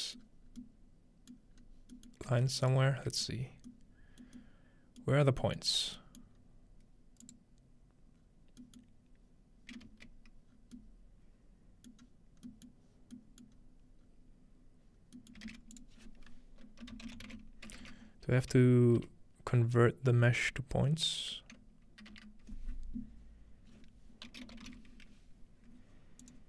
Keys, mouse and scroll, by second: 0.2-0.7 scroll down 2, 0.5 middle click, 1.6-2.6 middle drag, 1.6 scroll up 2, 2.6-4.8 alt+shift+drag, 3.4 scroll up 1, 5.2 middle click, 5.6-8.2 middle drag, 6.0-7.2 scroll up 2, 7.2 click, 8.2-8.9 scroll down 2, 8.9-10.5 middle drag, 9.9 z, 10.5-11.5 scroll down 2, 11.5-11.9 scroll down 1, 12.0-13.7 middle drag, 13.6-14.1 scroll up 1, 14.1-14.9 scroll down 2, 15.5 shift+a, 15.8 shift+click, 17.1-18.2 typing, 23.1 BackSpace, 24.5 typing, 26.2-26.4 drag.